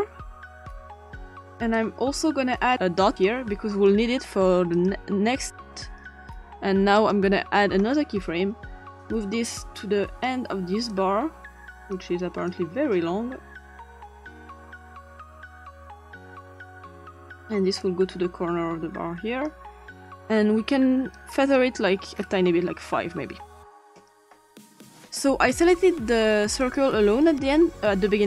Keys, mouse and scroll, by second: 0.5 click, 1.6 click, 2.7 click, 3.9 click, 7.0 click, 9.0-10.3 drag, 10.9-11.9 drag, 12.2 click, 12.5-13.8 drag, 15.8 click, 16.5 click, 17.8-19.5 drag, 21.1 click, 25.5 click, 26.6 click, 27.2 click.